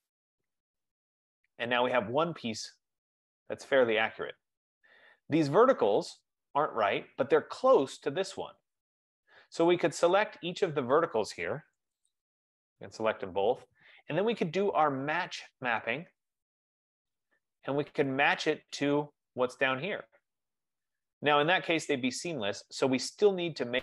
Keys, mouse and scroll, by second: 0.3 click, 1.6 click, 2.1-2.6 scroll, 3.2-4.6 scroll, 4.9 scroll, 6.2 click, 8.1 click, 10.2 click, 12.5 shift+click, 16.6 click, 19.2 click, 21.0-22.6 scroll, 23.0-23.8 scroll.